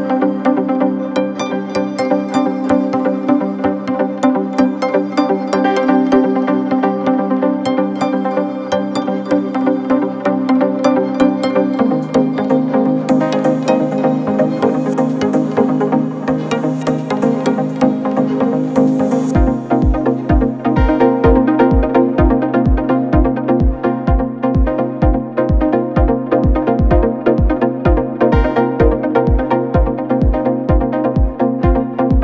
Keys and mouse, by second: 0.7 s, 8.1 g, 10.2 s, 11.8 s, 13.0 shift+click, 13.3-14.3 drag, 14.6 s, 16.2 g, 17.5 s, 20.7-22.8 drag, 20.7-25.4 middle drag, 20.7-22.8 right drag, 26.2 shift+d, 27.4 s, 29.6-30.2 drag, 31.3-31.7 shift+drag, 32.1 s.